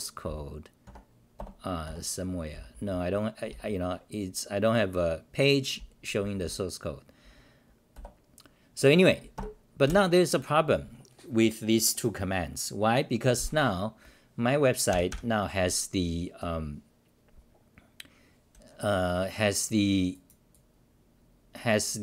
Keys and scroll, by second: 0.2 w, 0.8 Tab, 1.5 Return, 1.8 -, 2.5 t, 2.7 t, 3.5 c, 4.5-5.6 scroll down 3, 6.2 c, 6.4 c, 7.9 1, 9.3 ctrl+g, 9.8 ctrl+w.